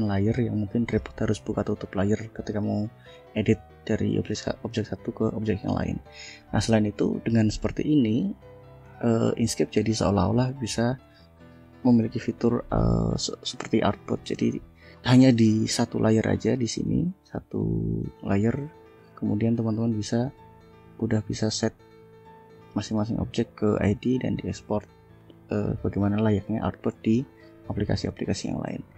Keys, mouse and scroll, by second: 8.8 click, 10.7 shift+scroll down 2, 14.4 click, 17.6 shift+scroll down 2, 19.4 click, 19.8 click, 20.2 click, 20.7 click, 21.4 click, 21.8 click, 22.4 click, 23.5 click, 23.9 click, 24.3 click, 24.9 click, 26.5 ctrl+s.